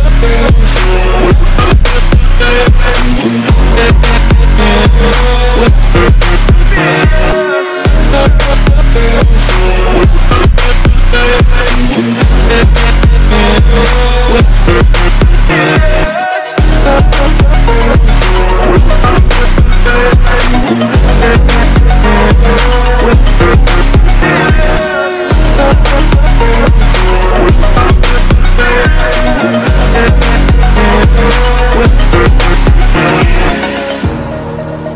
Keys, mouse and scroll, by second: 0.1 a, 2.7-3.5 scroll up 3, 4.2 scroll down 1, 5.8 click, 7.7-8.4 scroll down 1, 8.4 click, 12.7-13.5 scroll down 1, 13.5 click, 17.9 scroll down 1, 18.5 scroll down 1, 18.9 scroll up 1, 20.1 click, 26.0 click, 34.3 scroll down 1.